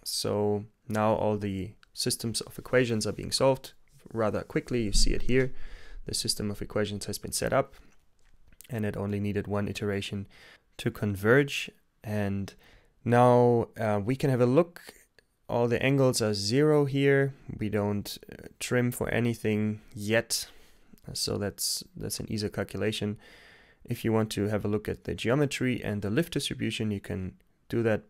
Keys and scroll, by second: 23.8 g, 24.4 Return.